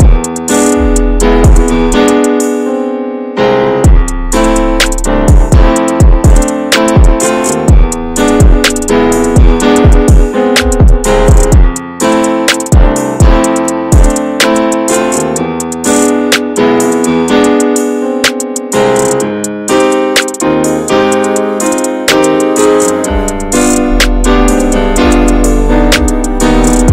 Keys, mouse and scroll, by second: 1.0 scroll down 2, 1.2 middle click, 1.3-2.0 scroll up 3, 1.6-1.9 shift+middle drag, 2.0-2.8 scroll down 3, 2.8 shift+middle click, 3.1 click, 3.4-4.0 middle drag, 4.0 scroll up 1, 4.3-6.2 shift+middle drag, 6.2-6.8 scroll up 3, 6.5 shift+middle click, 6.8-7.9 middle drag, 7.9-8.3 scroll down 1, 8.3-9.2 middle drag, 9.2 scroll up 1, 9.4-10.5 middle drag, 10.5 click, 11.0-11.9 middle drag, 11.9 click, 12.2-14.4 middle drag, 14.4-17.7 drag, 17.7-18.9 middle drag, 18.9-20.0 drag, 20.0-21.4 shift+middle drag, 21.4 click, 21.8-22.3 middle drag, 22.3-22.6 shift+scroll up 1, 22.7-23.4 middle drag, 23.4-24.2 shift+scroll up 4, 23.6 shift+middle click, 24.2-26.9 middle drag.